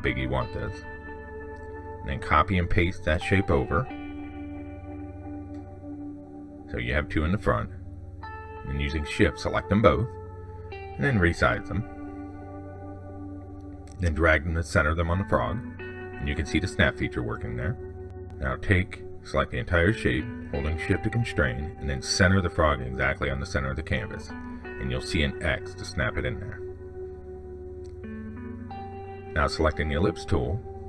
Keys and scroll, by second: 3.2 ctrl+c, 3.3 ctrl+v.